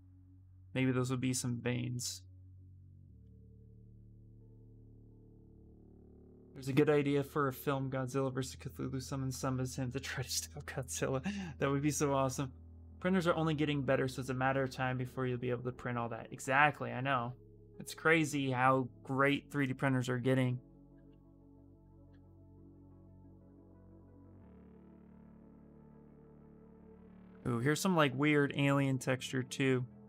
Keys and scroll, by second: 21.2 s.